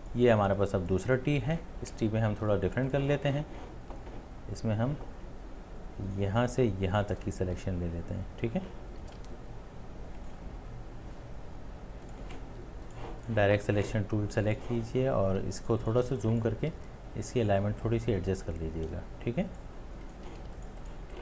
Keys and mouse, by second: 0.6 space, 0.9 click, 0.9 space, 1.0 space, 8.9 space, 9.0 ctrl+z, 15.4 ctrl+z, 15.4 space, 16.0 ctrl+space, 20.5 space.